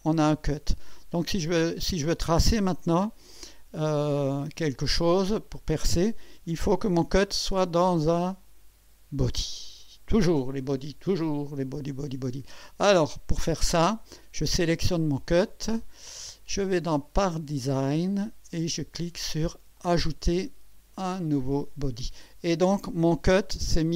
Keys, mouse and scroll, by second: 0.7 click, 1.4 click, 3.0 click, 3.7-4.1 scroll down 1, 4.6-5.6 drag, 16.5 click, 17.7 click, 19.8 click, 21.5 click.